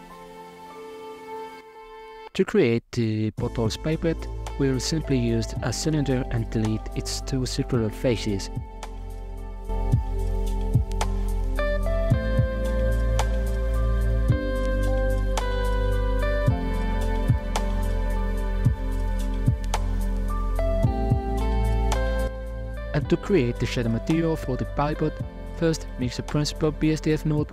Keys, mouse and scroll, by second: 4.3 s, 5.7 Tab, 6.1 right click, 6.5-6.9 scroll down 2, 6.9 middle click, 7.7 shift+right click, 9.4 middle click, 9.7 s, 11.0 g, 12.5 s, 13.4 scroll up 4, 13.7 shift+middle click, 14.5 w, 14.9 Tab, 15.4 alt+z, 16.0 g, 17.6 Tab, 18.0-18.6 middle drag, 18.6 a, 18.7 a, 18.8-19.3 middle drag, 19.3 alt+z, 19.6-22.5 drag, 22.5 z, 23.1 scroll down 4, 24.2 s, 25.9 shift+a.